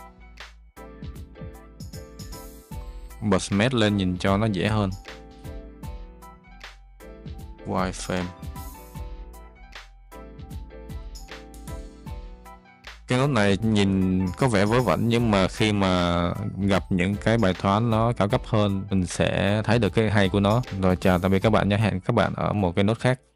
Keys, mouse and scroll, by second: 6.0-7.6 drag, 9.8-10.9 drag, 12.2 click, 12.9 middle click.